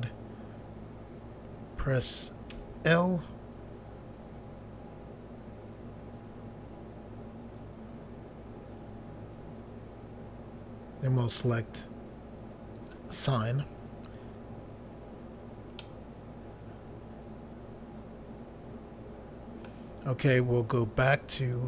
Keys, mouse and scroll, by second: 2.5 i, 12.8 click, 15.8 middle click, 21.4 click.